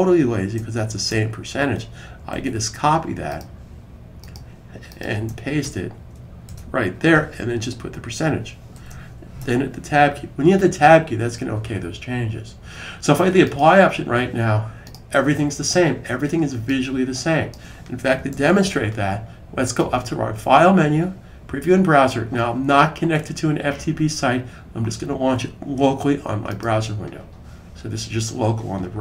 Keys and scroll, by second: 2.0 super+c, 6.3 super+v, 8.6 shift+5, 18.1 super+s.